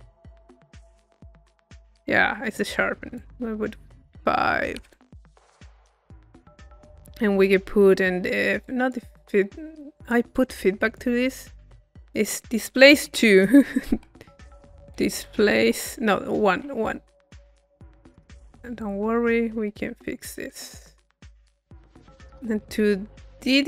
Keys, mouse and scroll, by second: 3.2-4.9 drag, 5.4-6.6 middle drag, 6.6 click, 7.2-8.6 middle drag, 8.6 click, 9.0 middle click, 10.0-11.7 drag, 11.4-12.5 middle drag, 11.9-13.0 drag, 13.3 click, 13.3 middle click, 15.0 click, 17.8-19.5 drag, 20.2-21.4 drag, 21.8 click, 23.3 click.